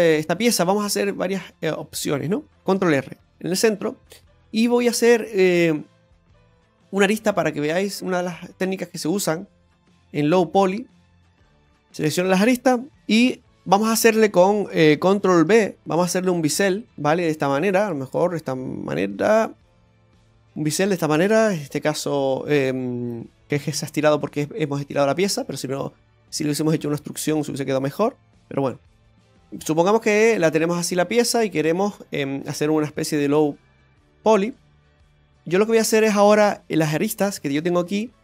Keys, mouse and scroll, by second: 0.5 middle click, 1.3 shift+middle click, 1.8 middle click, 2.6 middle click, 2.6 scroll down 2, 3.0 ctrl+r, 3.6 middle click, 4.0-4.3 scroll up 4, 4.5 middle click, 5.1 scroll down 2, 5.9 middle click, 7.9 click, 7.9 right click, 8.9 ctrl+right click, 10.1 right click, 10.6 ctrl+right click, 10.7 ctrl+right click, 11.0 ctrl+right click, 11.2 middle click, 13.1 shift+middle click, 13.4-13.9 scroll down 2, 15.7 ctrl+b, 20.3 right click, 20.7 middle click, 21.3 middle click, 22.2 right click, 23.5 g, 25.4 scroll down 1, 26.4 right click, 26.7 g, 29.8 middle click, 30.9 click, 31.9 middle click, 33.0 right click, 34.2 ctrl+z, 34.7 shift+right click, 35.3-35.6 scroll up 2, 35.7 middle click, 36.0 scroll up 1, 36.3 shift+middle click, 36.9 scroll down 2, 37.3 middle click, 38.0 scroll up 2.